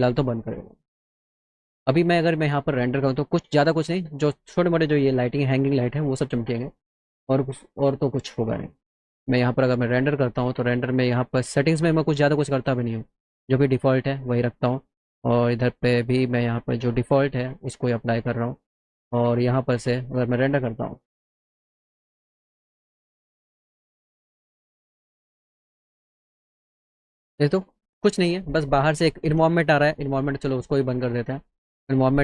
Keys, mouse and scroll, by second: 1.1 click, 8.9 click, 14.6 click, 15.1 click, 16.3 click, 16.7 click, 17.6 click, 19.6 click, 30.7 click, 31.3 click.